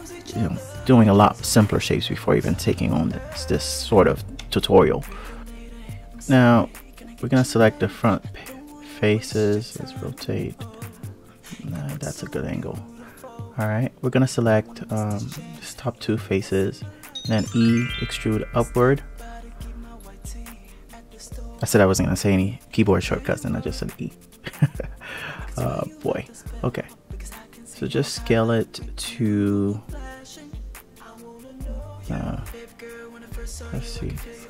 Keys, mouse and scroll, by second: 4.2 alt+z, 5.2 click, 6.8 click, 9.3 click, 12.1 click, 12.8 click, 13.4 click, 15.4 shift+click, 16.5 e, 20.9 click, 21.9 ctrl+r, 27.2 2, 27.7 click, 28.3 alt+click, 29.4 g, 33.3 click.